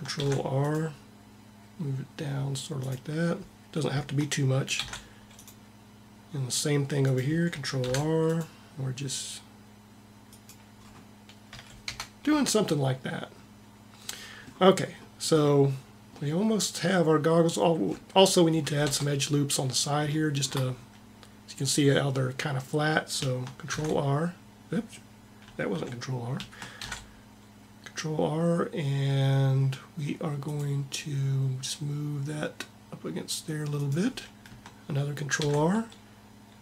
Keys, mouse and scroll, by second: 0.1 ctrl+r, 0.4 ctrl+r, 4.6 ctrl+r, 7.6 ctrl+r, 8.2 ctrl+r, 11.3 a, 11.6 Tab, 18.7 Tab, 23.5 ctrl+e, 26.6 ctrl+r, 35.3 ctrl+r.